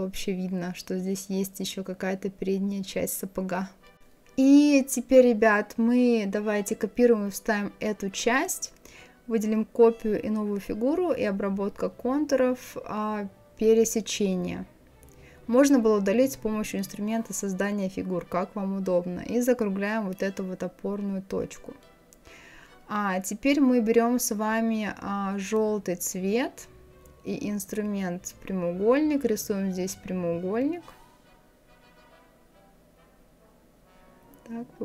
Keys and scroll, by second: 7.8 ctrl+c, 8.2 ctrl+f.